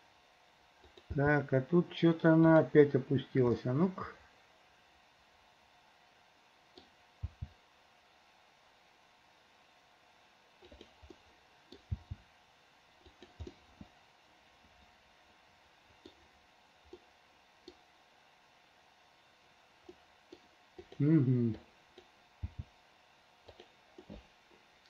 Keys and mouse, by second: 0.9 click, 1.3 g, 3.7-6.9 middle drag, 7.4 g, 11.2 middle click, 12.1 g, 13.7-16.2 middle drag, 17.2 middle click, 20.0 click, 21.0 click, 21.8 click, 22.6 g, 24.1-24.8 middle drag.